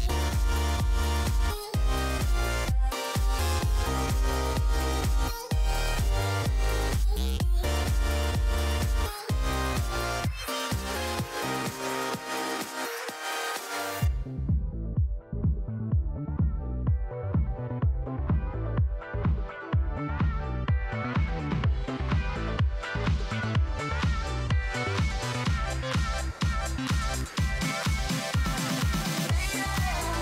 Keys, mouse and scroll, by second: 2.2 KP_0, 4.0 alt+h, 14.0 shift+z.